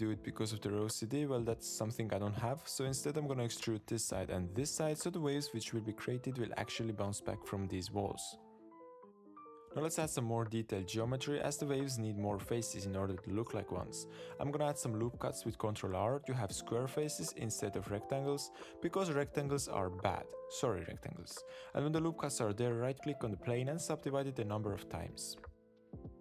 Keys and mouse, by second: 0.8 Tab, 0.9 click, 1.2 2, 1.2 click, 1.5 g, 2.7 click, 3.7 e, 7.5 shift+click, 8.2 g, 9.0 Tab, 9.6 Tab, 11.0 ctrl+r, 19.1 ctrl+r, 21.7 alt+click, 21.8 click, 21.8 middle click, 22.0 middle click, 22.2 shift+middle click, 22.3 middle click, 22.5 middle click, 22.7 shift+middle click, 23.2 a, 23.6-24.8 right drag, 25.5 click, 25.9 click, 26.0 click, 26.1 click.